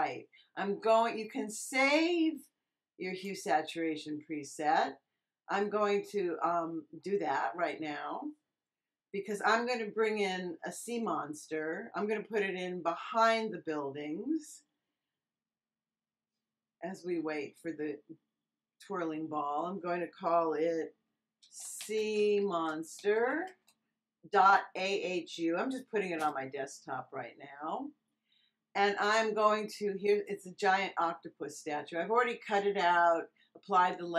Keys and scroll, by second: 21.1-23.9 typing, 26.1 Return.